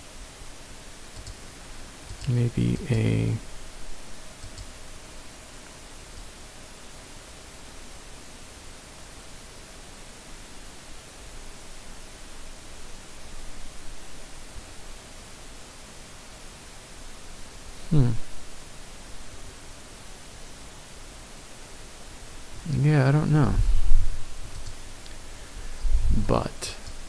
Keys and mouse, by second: 1.2 drag, 2.0 click, 2.9 click, 4.4-22.1 drag.